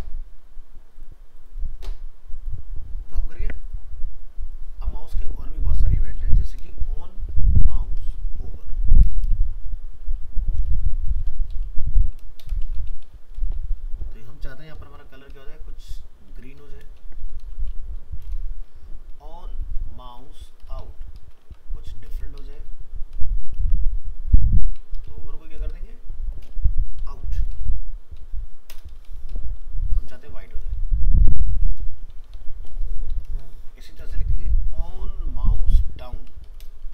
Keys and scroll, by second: 21.4 ctrl+c, 23.6 ctrl+v, 34.0 ctrl+c, 36.8 ctrl+v.